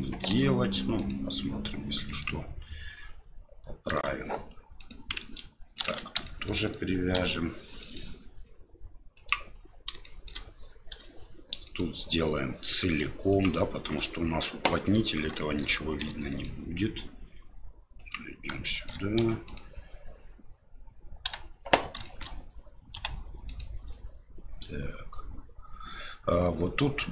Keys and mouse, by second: 0.3 e, 3.9 e, 6.2 shift+middle click, 7.1 e, 10.0 shift+middle click, 10.9 e, 15.3 shift+middle click, 16.0 e, 18.6 shift+middle click, 22.0 shift+middle click.